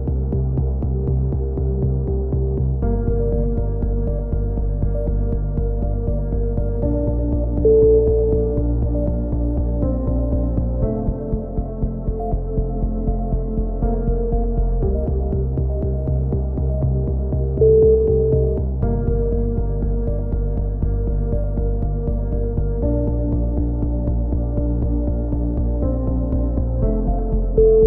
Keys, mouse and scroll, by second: 0.5 z, 1.2 Tab, 2.5-5.4 drag, 3.6 Tab, 7.2 middle click, 7.7 Tab, 8.5 Tab, 9.0 alt+h, 9.4 a, 9.7-12.1 drag, 12.5 middle click, 12.7 click, 13.1 middle click, 13.3 right click, 14.2 click, 14.6 middle click, 14.7 click, 15.7-18.3 middle drag, 18.3-19.3 drag, 19.3 middle click, 19.6 click, 20.5-21.6 middle drag, 21.6 click, 21.9 middle click, 22.7 click, 24.5 ctrl+z, 25.2 ctrl+z, 25.6 a, 26.0 Tab, 26.4 click.